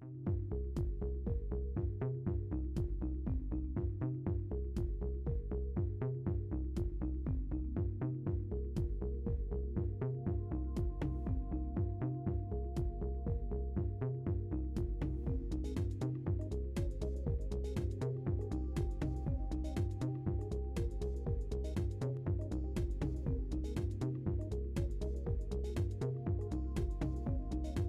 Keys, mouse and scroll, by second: 1.8 click, 4.4 F4, 5.3 scroll up 2, 6.2 KP_1, 6.7-7.4 scroll up 3, 7.8 scroll down 1, 9.9 right drag, 10.7 right click, 11.3 click, 11.7 right click, 12.4 right click, 13.3 right click, 15.1-22.3 drag, 22.8 right click, 23.5-23.8 scroll down 2, 24.7 scroll up 2, 25.8 scroll down 2, 26.1-27.8 middle drag.